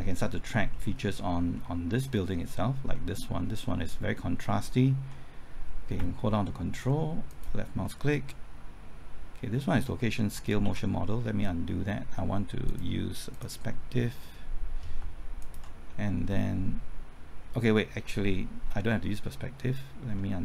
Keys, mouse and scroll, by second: 0.1-0.7 scroll up 1, 0.7 middle click, 1.1-1.5 scroll up 1, 1.5 middle click, 2.3-2.9 scroll up 1, 2.9-4.0 middle drag, 6.0 typing, 7.3 ctrl+click, 10.6 ctrl+z, 12.7 click, 15.4 ctrl+click, 15.9-17.0 middle drag.